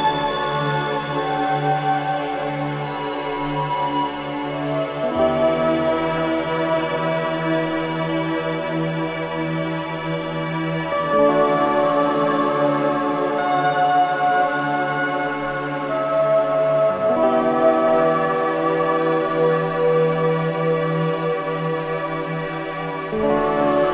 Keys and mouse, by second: 0.9 s, 13.1 Tab, 14.5 click, 15.8 click, 17.7 ctrl+r, 22.9 click, 23.1 click.